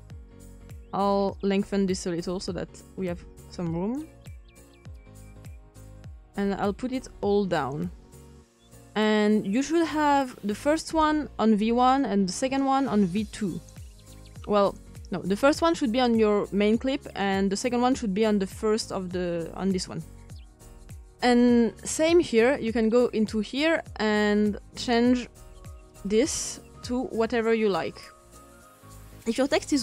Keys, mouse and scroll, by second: 10.8-16.5 drag, 23.2-29.0 drag.